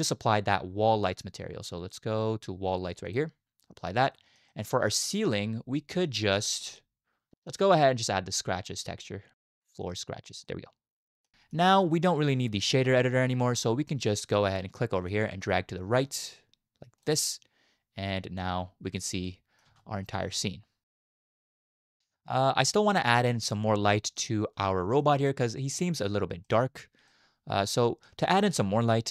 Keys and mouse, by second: 0.2-3.1 drag, 4.1 shift+middle drag, 4.5 middle click, 5.2 click, 5.8 shift+drag, 7.6-9.9 drag, 10.4-11.2 middle drag, 10.8 click, 11.3 middle click, 15.1-17.1 drag, 18.4-19.0 middle drag, 19.3-19.6 middle drag, 19.3 click, 19.7 space, 20.1-21.4 middle drag, 22.0-23.1 middle drag, 22.9 click, 23.9 shift+drag, 24.0 shift+middle drag, 25.0 middle drag, 26.4 middle drag, 27.2-27.7 middle drag, 28.2 shift+middle click, 28.5 middle click.